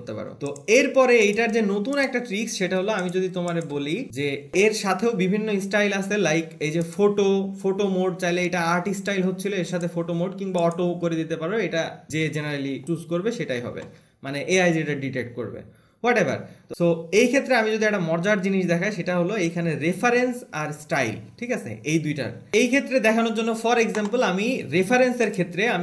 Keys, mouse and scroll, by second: 0.9 click, 1.6 click, 2.4 click, 3.2 BackSpace, 3.4 click, 12.1-15.6 scroll, 17.1-22.5 scroll, 22.5 click, 22.9-25.6 scroll, 25.6 click.